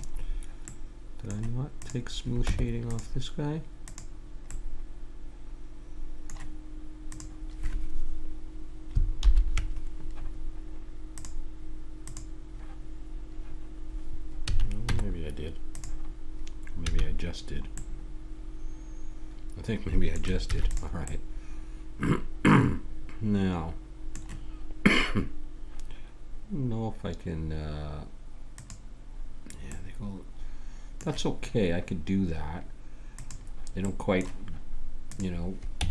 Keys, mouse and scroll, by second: 0.0-1.8 middle drag, 1.8-3.8 drag, 2.4 Tab, 3.8-5.7 middle drag, 6.0-7.1 middle drag, 7.1-8.9 drag, 9.2 ctrl+l, 11.1-13.8 drag, 14.4 a, 14.9 Tab, 16.8 a, 19.3 middle click, 20.4 ctrl+s, 22.0-23.2 middle drag, 28.5-29.7 drag, 29.7-33.2 middle drag, 33.2 click, 33.8-35.0 middle drag, 35.1 middle click, 35.7 Tab.